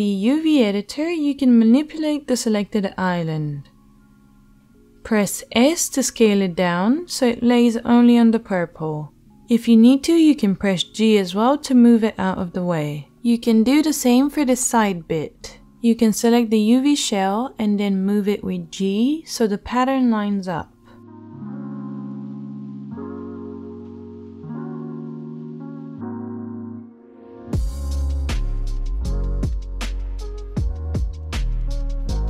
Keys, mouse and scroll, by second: 3.7-6.7 middle drag, 3.7-6.7 right drag, 5.6 s, 7.5 g, 15.8 l, 20.6 shift+middle click, 21.1-22.1 right drag, 22.1-24.6 middle drag, 24.6-27.4 right drag, 26.5 click, 26.5 middle click, 26.6 g, 31.5-32.2 middle drag.